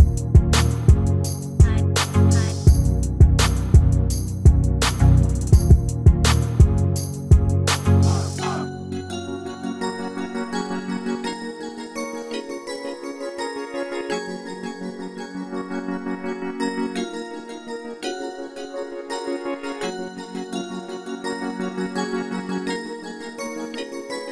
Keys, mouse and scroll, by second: 3.8 Tab, 4.3-6.5 middle drag, 6.3 scroll up 1, 8.4-10.0 drag, 10.9 Tab, 12.1 middle click, 12.9-14.7 right drag, 19.1-21.0 drag, 19.9-22.1 middle drag, 22.1-22.7 scroll up 1, 22.7-24.3 drag.